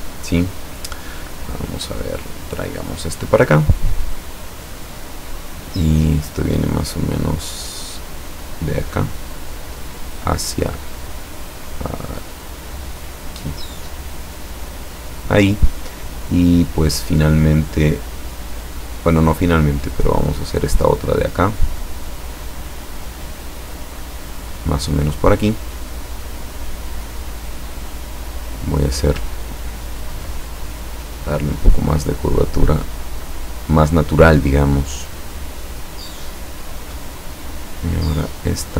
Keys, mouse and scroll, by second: 2.7 click, 3.0-8.1 scroll down 2, 8.9 click, 9.3 scroll down 2, 14.2 click, 20.5 click, 22.6 click, 24.3 click, 28.8 click, 29.6-30.0 ctrl+scroll up 2, 30.6 ctrl+click, 32.2-33.5 drag, 36.9 click, 37.4 click, 38.2 click.